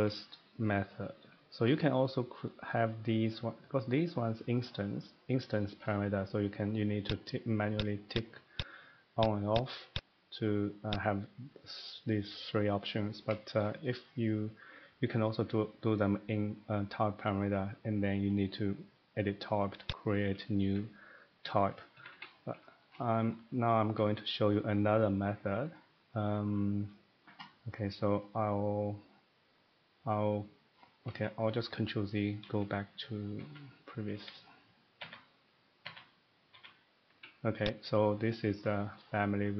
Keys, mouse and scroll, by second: 0.0 middle click, 1.7 shift+middle click, 7.1 click, 7.8 click, 8.1 click, 8.6 click, 9.2 click, 9.6 click, 10.0 click, 11.0 click, 13.2 middle click, 13.5 shift+middle click, 17.3 scroll up 1, 17.6 scroll down 1, 18.1 middle click, 19.9 click, 20.6 Escape, 22.0 Escape, 22.1 Escape, 22.2 middle click, 22.3 middle click, 22.9 shift+middle click, 23.2 middle click, 23.8 middle click, 26.1 middle click, 27.4 scroll, 30.7-31.2 scroll down 5, 31.2 middle click, 32.4 ctrl+z, 33.4 ctrl+z, 33.5-33.8 scroll, 34.1 ctrl+z, 35.0 ctrl+z, 35.8 ctrl+z, 36.5 ctrl+z, 37.7 click, 38.1 scroll, 38.4 scroll up 1, 38.4 middle click.